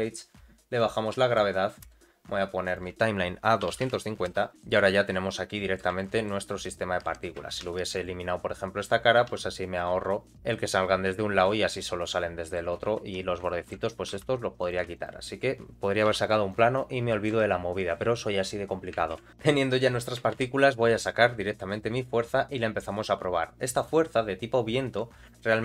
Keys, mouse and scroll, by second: 0.7 click, 1.8 space, 2.6-4.5 drag, 4.5 shift+Left, 4.5-5.8 middle drag, 6.0 shift+middle click, 6.6 middle click, 7.4 Tab, 7.6 3, 7.9 click, 9.3 x, 10.3 Tab, 10.5-12.5 middle drag, 13.0 Tab, 13.1 scroll up 2, 13.4 shift+middle click, 14.1 3, 14.6 click, 14.9 alt+click, 16.1 x, 17.1 middle click, 17.3 Tab, 17.6-18.9 scroll down 2, 19.1 shift+Left, 19.3 scroll down 1, 19.3 space, 19.4 space, 20.3 shift+a.